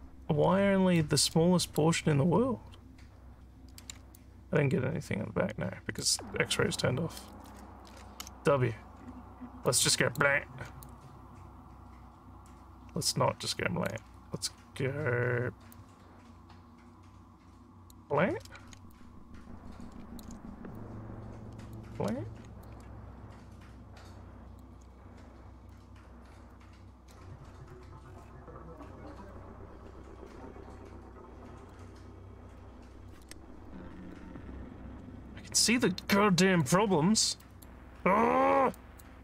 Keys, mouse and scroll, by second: 1.4 alt+middle click, 4.2-6.0 alt+drag, 8.2 w, 9.7 click, 10.9-13.9 alt+drag, 15.8-17.9 drag, 19.0-20.3 alt+drag, 20.8-21.8 shift+drag, 22.7-24.6 alt+drag, 25.7 click, 26.6 click, 27.7 click, 28.8 click, 30.3-31.7 drag, 32.6 click, 33.7 click, 35.3-36.6 alt+drag, 37.0 alt+scroll up 1, 37.4 alt+middle click, 38.0 scroll down 3, 38.8 alt+click.